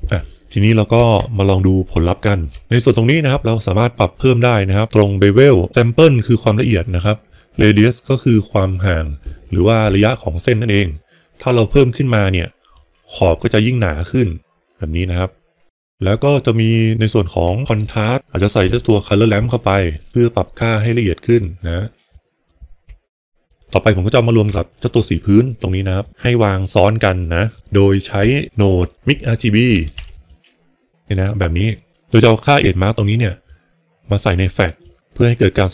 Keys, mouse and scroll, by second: 1.8 ctrl+shift+click, 8.2-12.8 drag, 20.1 click, 22.0 click, 22.8 shift+click, 24.9 ctrl+shift+click, 26.0 ctrl+shift+click, 27.5 ctrl+shift+click, 33.6-35.0 drag, 35.0 middle click.